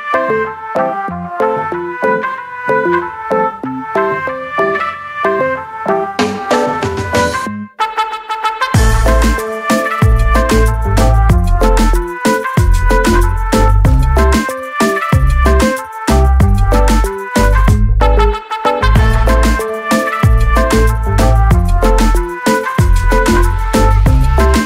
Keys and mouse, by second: 4.6 click, 7.4 click, 8.5 click, 9.0 ctrl+a, 9.3-14.6 typing, 14.7 click, 18.3 click, 19.6 click, 19.9 double click, 20.0 click, 20.2 double click, 20.3 click, 20.5 double click, 20.6 click.